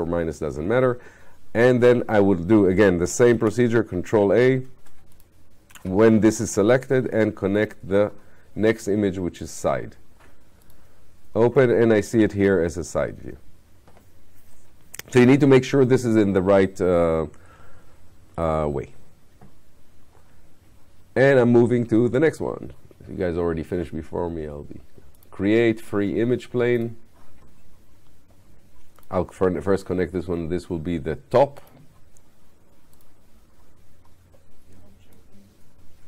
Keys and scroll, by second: 3.3 ctrl+a.